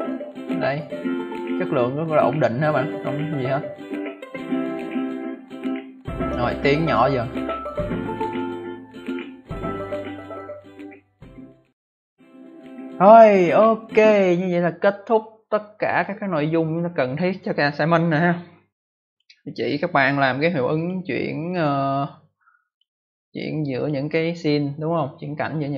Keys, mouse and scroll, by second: 13.9 click, 15.8 click, 19.0 click, 20.7 click, 20.8 click, 21.5 click, 21.6 click, 22.6 click, 23.7 click, 25.3 space, 25.5 click.